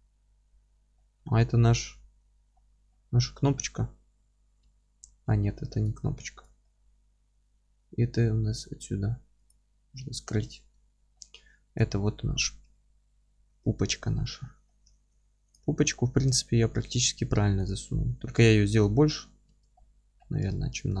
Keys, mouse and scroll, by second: 0.7-9.4 middle drag, 0.9-1.6 scroll down 2, 1.6-2.5 scroll up 2, 2.5-3.6 scroll down 2, 4.6 Tab, 5.1 scroll up 1, 5.3 Tab, 9.4 click, 9.9-15.5 middle drag, 10.5-10.8 scroll down 1, 10.8 alt+z, 12.7 KP_1, 14.2-14.7 scroll up 2, 14.9 alt+z, 15.5 click, 15.8-16.4 scroll up 1, 16.4-17.7 scroll down 1, 17.7 click, 18.0-18.8 scroll up 1, 18.8 click, 19.1 scroll down 1, 20.1-20.4 scroll up 1, 20.4-21.0 alt+middle drag.